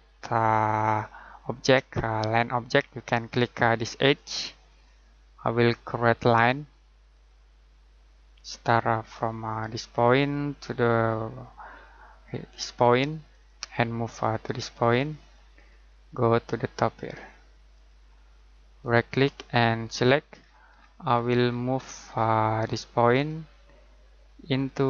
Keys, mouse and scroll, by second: 2.9-4.1 scroll down 1, 4.1 click, 10.0 click, 13.3 click, 18.8 right click, 19.8 click, 20.3-22.9 scroll down 1, 23.1 click.